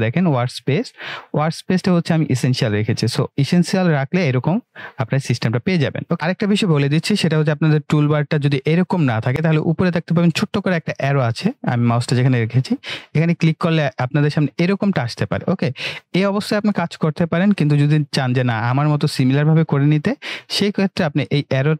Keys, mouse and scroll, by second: 2.6 click, 12.8 click.